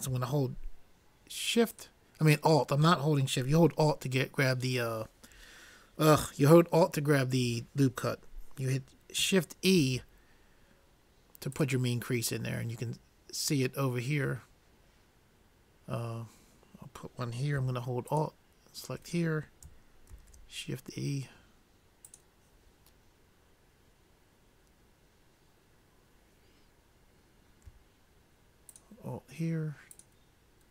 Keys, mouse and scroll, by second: 2.0-3.6 drag, 9.9 shift+e, 18.5-20.2 drag, 20.3 shift+e, 22.1 click, 29.1-30.7 drag.